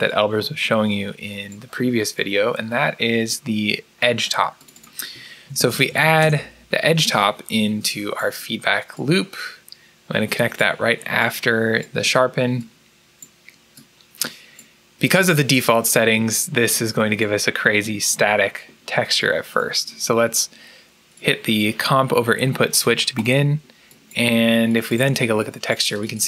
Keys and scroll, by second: 5.1-6.5 typing.